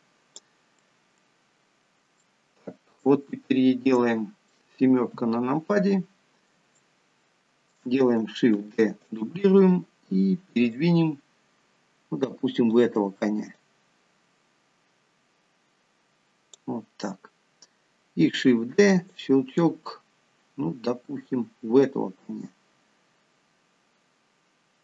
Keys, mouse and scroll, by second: 1.0 middle click, 2.5 shift+middle click, 3.4-4.0 scroll down 5, 4.2 middle click, 5.4 KP_7, 6.3-6.7 scroll up 2, 7.0 shift+middle click, 8.9 shift+d, 10.9 click, 13.8 click, 18.9 shift+d, 19.8 click.